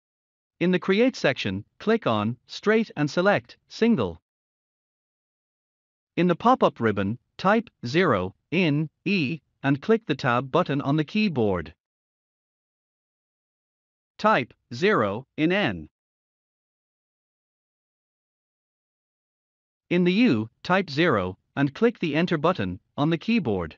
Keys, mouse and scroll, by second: 3.1 click, 5.3 click, 12.0 0, 12.9 Tab, 19.0 0, 20.5 Tab, 23.4 0.